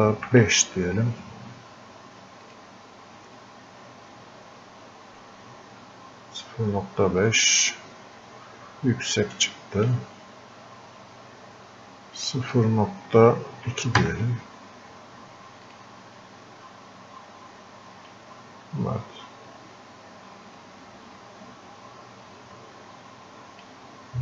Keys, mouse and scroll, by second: 2.5 click, 7.3-12.3 drag, 15.7 click, 18.1-24.2 drag.